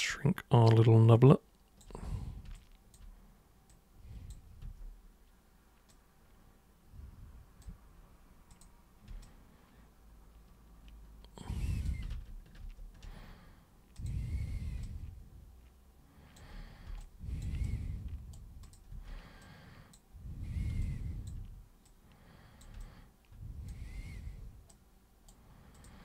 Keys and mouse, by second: 2.6 alt+super+click, 3.7 super+click, 4.6 super+w, 5.9-7.6 super+drag, 8.5 super+click, 9.2-11.9 alt+super+drag, 12.7 ctrl+super+z, 13.9 super+click, 14.9-16.4 alt+super+drag, 17.0-17.4 alt+super+drag, 17.7 super+right click, 18.7 super+click, 18.9 super+w, 19.4-20.0 super+drag, 20.9-21.3 alt+super+drag, 21.8-22.6 super+drag, 22.8 alt+super+click, 24.7 super+right click, 25.7 super+click.